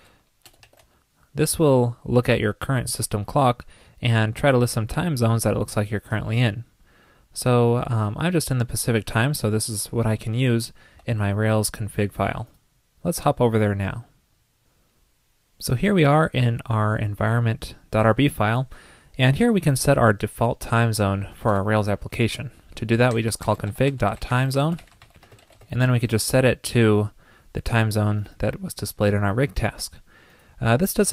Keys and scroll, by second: 0.3 super+c, 0.7 super+v, 11.0 super+c, 26.2 super+v.